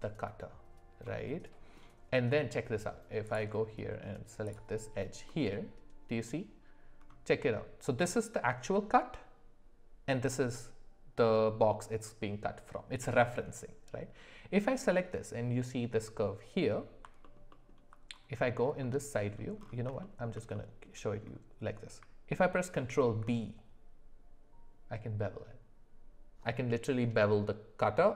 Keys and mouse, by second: 1.0 middle click, 4.4 click, 5.3 middle click, 17.5 alt+middle click, 18.8 middle click, 20.0 shift+middle click, 20.5 middle click, 22.8 ctrl+b.